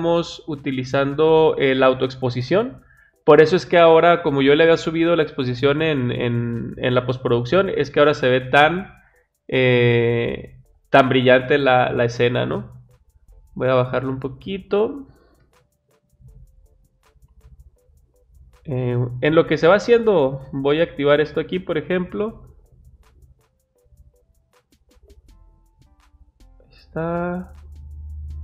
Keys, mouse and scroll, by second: 0.3-1.0 drag, 2.9 click, 12.6-14.0 drag, 20.7 click, 22.7 click, 24.5-26.5 drag, 28.0 click.